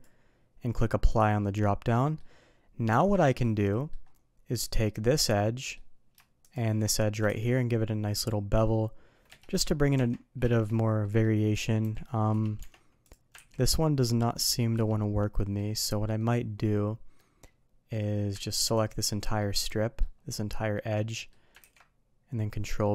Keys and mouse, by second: 1.5-2.1 middle drag, 2.9 Tab, 3.4-3.9 middle drag, 4.6 click, 4.9-5.7 middle drag, 6.4 shift+click, 7.2 ctrl+b, 9.9 Tab, 10.4 shift+middle drag, 11.0 middle click, 11.5 click, 11.8 g, 12.5 Tab, 13.0 click, 13.3 ctrl+b, 15.3 middle drag, 16.1-17.1 middle drag, 17.4-17.9 middle drag, 19.3-20.0 middle drag, 20.7 middle drag, 21.1 middle click, 21.6 ctrl+b.